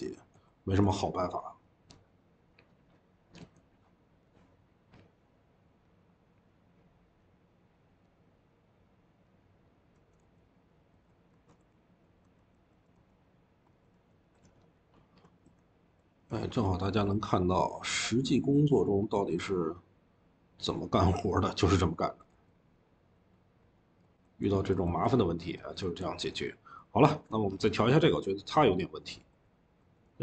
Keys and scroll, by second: 0.0-1.9 typing, 10.5-16.1 typing, 24.1-24.9 typing, 26.0 typing, 30.1-30.2 typing.